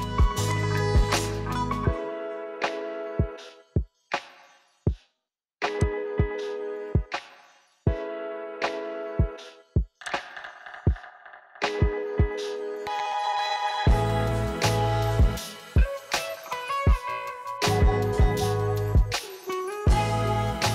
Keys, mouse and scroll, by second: 2.5 g, 6.6 g, 10.5-19.7 middle drag, 19.7 g.